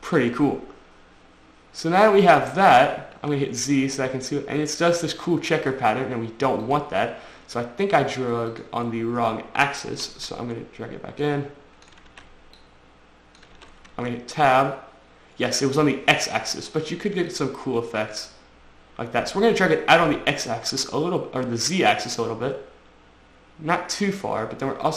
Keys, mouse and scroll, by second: 0.6 Tab, 2.2 Tab, 3.4 z, 4.0 middle click, 6.9 click, 7.0 click, 7.7 Tab, 8.7 click, 10.4 ctrl+z, 11.5 click, 12.3 ctrl+z, 12.8 click, 13.8 ctrl+z, 14.1 Tab, 14.7 click, 17.5 click.